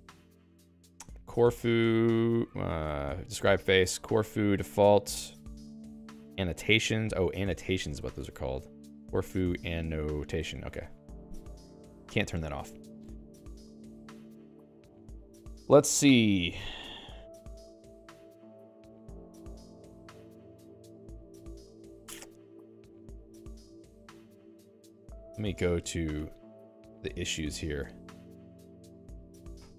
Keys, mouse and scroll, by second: 0.9-2.0 typing, 2.7 ctrl+g, 2.9 alt+x, 3.7 Return, 3.8-5.0 typing, 7.9 ctrl+g, 8.7-10.4 typing, 10.5 ctrl+g, 10.7 Escape.